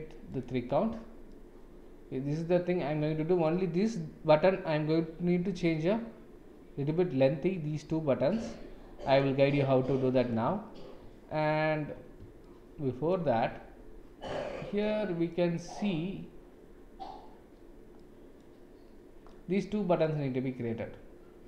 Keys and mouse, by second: 0.3 click, 1.3-3.4 middle drag, 8.4 click, 9.0 click, 9.7-10.3 middle drag, 12.4-13.1 shift+middle drag, 14.9 middle click, 17.9-18.5 middle drag, 19.4-20.0 middle drag.